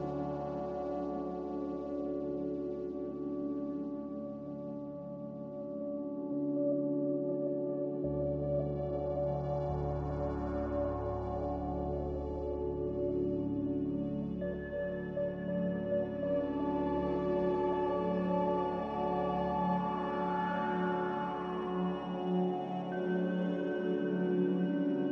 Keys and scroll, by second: 8.2 z, 9.9-11.3 typing, 20.9-21.8 typing.